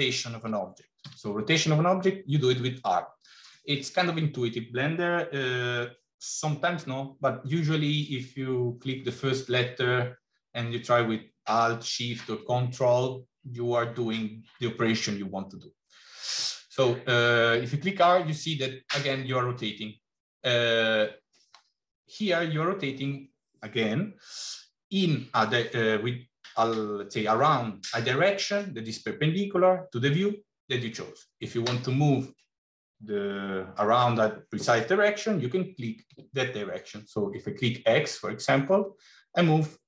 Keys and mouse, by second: 0.9 r.